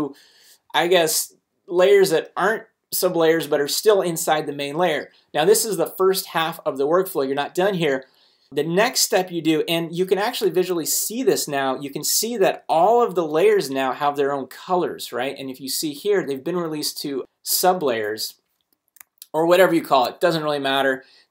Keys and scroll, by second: 10.7 super+a.